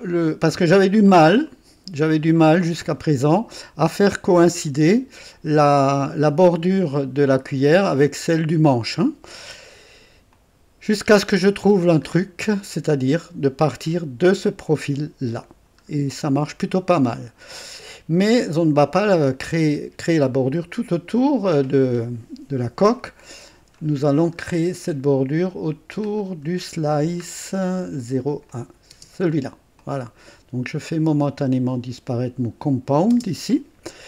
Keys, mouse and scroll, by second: 1.0-1.5 scroll up 2, 1.5 right click, 2.4-3.7 drag, 10.3-11.9 drag, 12.1-12.4 scroll up 2, 16.0-16.6 scroll down 2, 17.0-17.5 scroll down 2, 17.5 click, 18.8 right click, 23.8 scroll up 2, 24.4-24.7 scroll up 2, 26.1 scroll down 1, 26.9 scroll down 1, 28.5 click, 28.9 space, 29.8 click, 30.9 click, 33.1 space, 33.1 space.